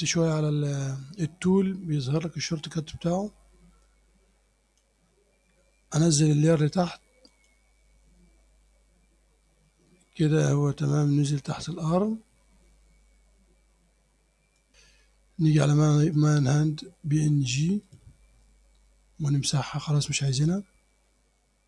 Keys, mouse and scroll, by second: 2.2-5.0 drag, 6.6 click, 7.3 click, 10.6-14.7 drag, 14.7-16.2 middle drag, 16.2 click, 17.9 click, 20.1 click, 21.3 scroll down 1.